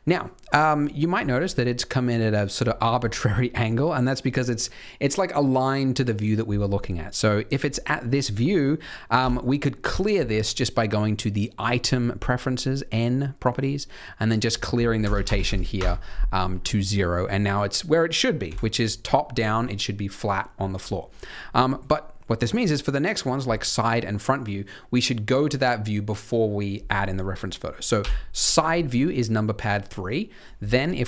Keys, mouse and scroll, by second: 0.4 middle click, 1.0-2.9 scroll down 1, 2.9 middle click, 6.7 middle click, 8.3 middle click, 9.1 n, 11.5 click, 14.3 click, 16.4-16.7 scroll up 4, 16.7 middle click, 18.4 KP_7, 19.2 middle click, 20.9-21.4 scroll down 2, 21.2 middle click, 21.6-22.2 scroll up 1, 27.9 KP_3, 28.7 shift+middle click.